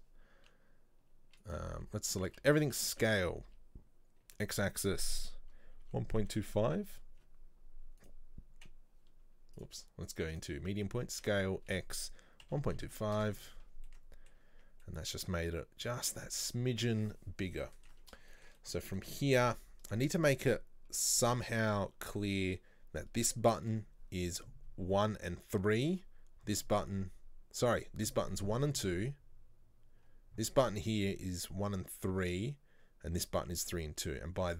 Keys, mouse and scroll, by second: 1.5 right click, 1.9 Tab, 2.3 a, 10.4 click, 11.2 s, 13.9 middle click, 14.6 Tab, 14.9-16.2 middle drag, 16.2-16.6 scroll up 3, 16.6-17.1 middle drag, 17.1-17.6 scroll up 2, 17.6-22.1 middle drag, 22.1-22.7 scroll down 1.